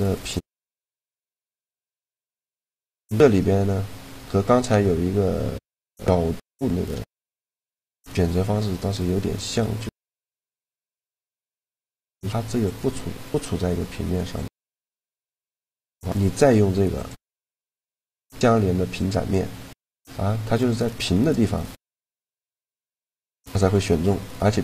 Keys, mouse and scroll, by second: 1.0-8.5 middle drag, 9.9-11.7 right drag, 11.2-15.9 drag, 11.8-13.7 right drag, 13.3 middle click, 14.7-16.6 right drag, 19.6-21.5 middle drag, 22.5-24.1 middle drag.